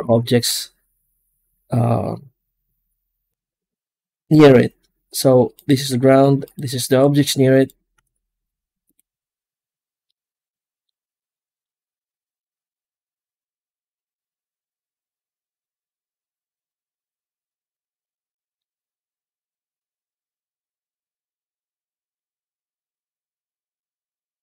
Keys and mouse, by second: 0.0 ctrl+space, 5.4 right click, 5.8 g, 6.7 right click, 6.9 g, 7.8 z, 9.9 middle click, 11.1-11.5 middle drag, 16.6 click, 17.9 click, 18.3-19.6 middle drag, 20.1 right click, 21.1 middle click, 22.8-23.8 drag.